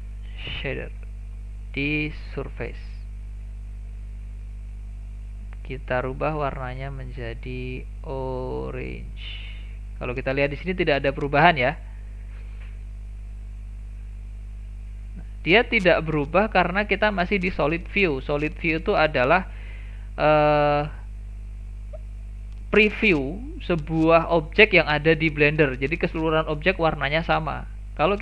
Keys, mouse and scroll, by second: 1.6-4.6 drag, 5.2 click, 9.5 click, 18.9-19.2 scroll down 2, 19.2-21.2 shift+middle drag, 21.2-22.0 scroll up 1, 22.0 shift+scroll up 1, 22.1-25.2 shift+middle drag, 25.2-26.2 scroll up 1.